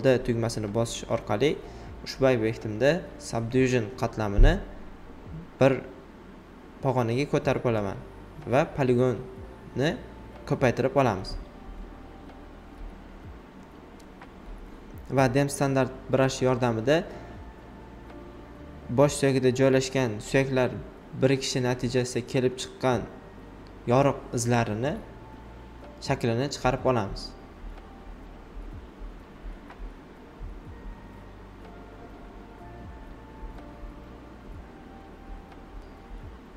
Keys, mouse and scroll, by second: 0.0-0.9 typing, 0.7 click, 1.5 alt+right click, 2.2 space, 2.4 click, 2.7 space, 3.2 alt+right click, 4.9-7.5 alt+drag, 7.5 ctrl+z, 8.2-11.8 drag, 11.8 ctrl+z, 12.7 x, 13.3-15.2 drag, 15.2 ctrl+z, 15.7 alt+right click, 16.7 ctrl+d, 17.6 alt+right click, 18.9-21.0 drag, 21.0 ctrl+d, 23.9-28.1 drag, 28.1 alt+right click, 29.9 alt+right click, 30.9 x, 31.3 alt+right click.